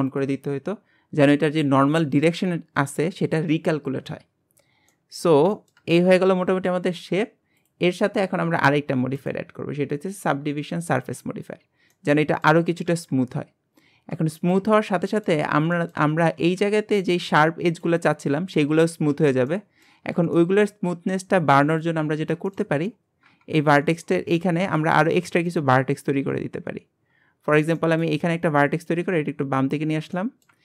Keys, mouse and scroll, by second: 0.1 click, 4.9-7.6 middle drag, 7.6-9.2 drag, 11.0 click, 11.6-11.9 scroll down 3, 11.9-13.1 middle drag, 13.1 KP_1, 14.0-15.1 scroll up 7, 14.4-14.7 shift+middle drag, 15.1 shift+middle drag, 15.4-15.8 scroll up 3, 15.8 shift+middle click, 16.1-18.6 scroll up 1, 18.6-19.2 scroll up 1, 19.5 middle click, 20.1 scroll down 2, 20.4-20.9 shift+middle drag, 20.9 Tab, 21.7 click, 22.0-22.5 scroll up 2, 22.5 shift+middle click, 22.8-23.4 scroll down 3, 23.4 KP_Decimal, 24.0 scroll down 1, 24.4 middle click, 25.2 ctrl+r, 27.4-27.8 scroll up 2, 27.8 middle click, 28.2 scroll up 2, 28.9 click, 30.2 middle click.